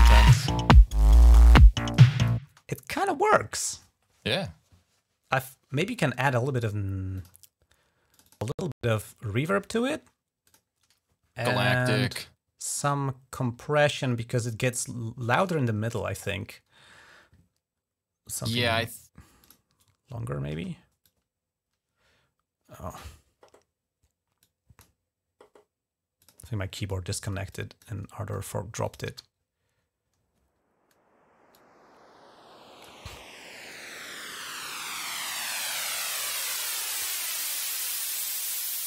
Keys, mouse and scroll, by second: 1.2 space, 1.7 click, 2.0 click, 2.2 space, 5.8 right click, 6.9 click, 7.9 click, 8.0 click, 10.3 click, 19.2 click, 20.4 space, 20.8-22.9 drag, 24.2 click, 26.0 click, 27.3 click, 28.6 click, 31.3-32.7 drag, 33.5-35.8 drag.